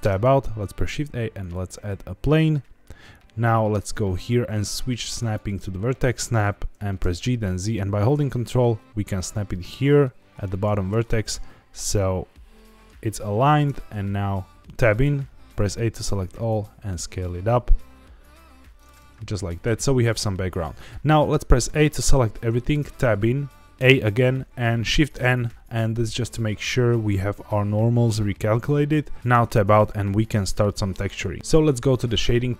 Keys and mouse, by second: 0.0 Tab, 0.6 shift+a, 2.3-2.8 middle drag, 3.7-5.6 drag, 7.0 g, 7.2 z, 10.4 ctrl+click, 11.2-11.7 middle drag, 12.5-12.9 middle drag, 13.5 Tab, 14.6 a, 15.9 s, 18.7 click, 19.0 Tab, 21.6 a, 22.7 Tab, 23.7 a, 25.1 shift+n, 29.2 Tab, 29.3 Tab, 29.7 middle click.